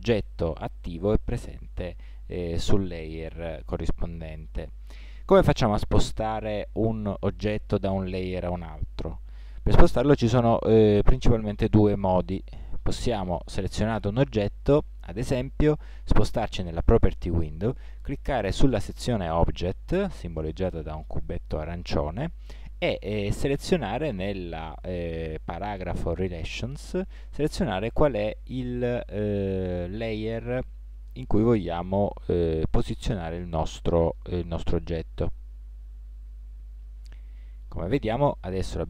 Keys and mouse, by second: 11.7 middle click, 12.2 middle click, 27.5-36.9 drag.